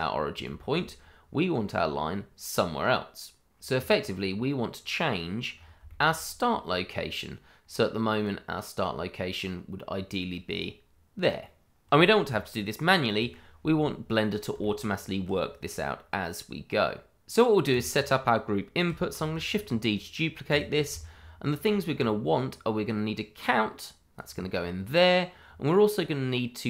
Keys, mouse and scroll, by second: 0.0 scroll down 1, 0.4 shift+middle click, 5.5 scroll up 1, 5.8 shift+middle click, 6.8-7.6 scroll down 1, 7.6-8.2 scroll up 1, 8.2 click, 11.4 middle click, 14.6 shift+middle click, 14.6 middle click, 14.8 shift+middle click, 17.2 click, 19.7 shift+d, 20.6 click, 21.0 shift+middle click, 21.0 middle click, 21.1 shift+middle click, 23.4 click.